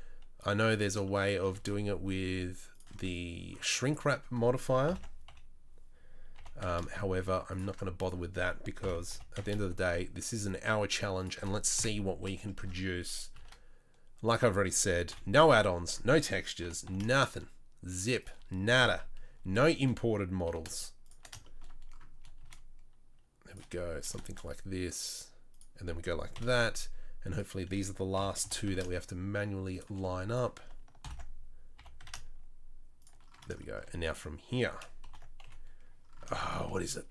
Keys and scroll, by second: 1.5 shift+d, 4.8 ctrl+l, 5.2 KP_3, 6.3 g, 8.8 ctrl+l, 9.1 g, 11.7 KP_7, 13.3 shift+d, 15.1 KP_Decimal, 15.1 KP_3, 16.6 g, 18.8 KP_7, 20.4 g, 22.4 shift+d, 24.2 shift+d, 26.3 KP_3, 28.1 ctrl+l, 28.4 g, 31.0 ctrl+l, 31.7 g, 35.0 ctrl+l, 35.4 KP_7, 36.5 z.